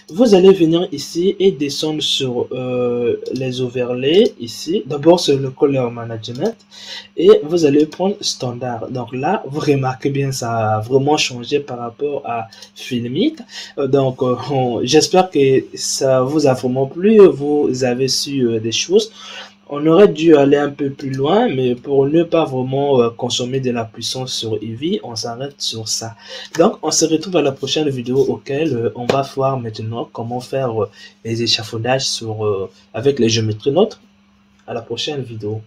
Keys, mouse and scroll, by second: 0.9-1.7 scroll down 17, 4.1-4.5 drag, 4.5-6.2 scroll down 8, 6.2-8.9 drag, 8.9-9.5 scroll down 4, 9.5-11.5 scroll up 4, 12.4-13.5 drag, 13.5-14.2 scroll down 3, 14.2-17.0 scroll up 4, 17.0-20.0 scroll down 3, 20.9 click, 21.7-23.8 middle drag, 23.8-24.4 scroll down 3, 24.4-27.4 middle drag.